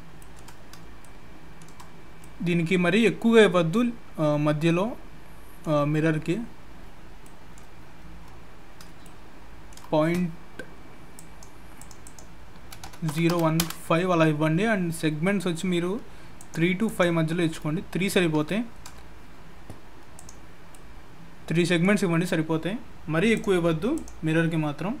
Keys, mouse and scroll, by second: 0.2 shift+middle click, 0.5 scroll up 2, 1.0 shift+middle click, 2.0 scroll down 2, 2.2 middle click, 6.9-7.9 scroll down 4, 7.2 middle click, 7.9-9.0 scroll up 7, 9.0 shift+middle click, 11.2 click, 12.0 click, 16.4 click, 16.8 click, 17.7-18.3 scroll down 5, 18.4 shift+middle click, 20.1 click, 20.5 scroll down 1, 20.7 middle click, 23.3 click, 24.6-25.0 scroll down 3.